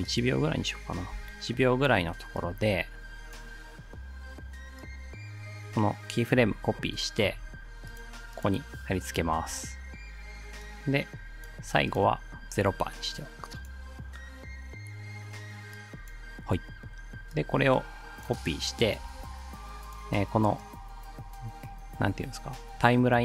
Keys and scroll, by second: 1.1 u, 7.3 ctrl+c, 9.3 ctrl+v, 19.0 ctrl+c.